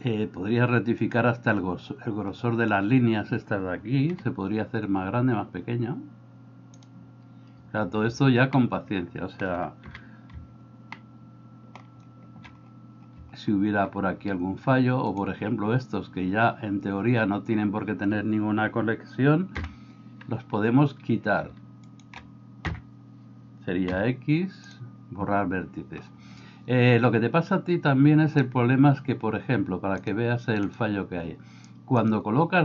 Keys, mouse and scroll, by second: 4.2 g, 8.6 middle click, 9.9 KP_7, 11.0 shift+middle click, 19.6 l, 22.8 l, 24.0 x, 30.1 click, 32.2-32.6 drag.